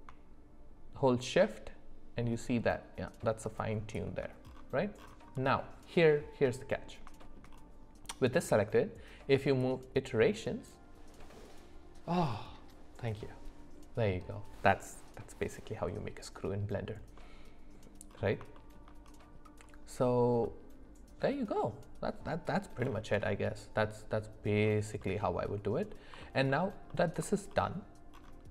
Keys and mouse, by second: 5.3 middle click, 6.4 middle click, 7.2 shift+middle click, 9.7-10.8 drag, 17.2 middle click, 18.5 shift+middle click, 20.4-22.1 middle drag, 25.0 middle click, 26.5 alt+middle click.